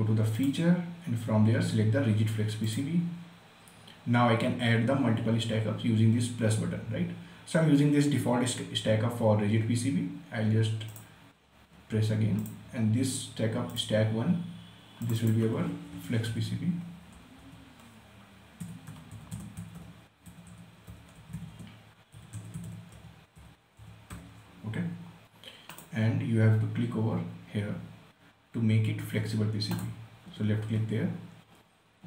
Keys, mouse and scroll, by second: 3.1 click, 11.3 click, 16.6-17.8 typing, 18.9-20.1 typing, 21.3-25.0 typing, 26.1 click, 30.1 click.